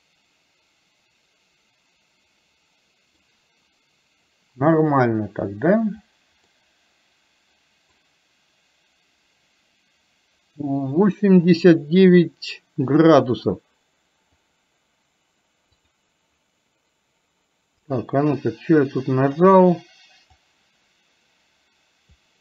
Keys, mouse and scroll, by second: 6.7-8.0 middle drag, 14.5 click, 15.9 click, 18.0 middle click, 18.4-19.4 middle drag, 20.5-22.3 drag.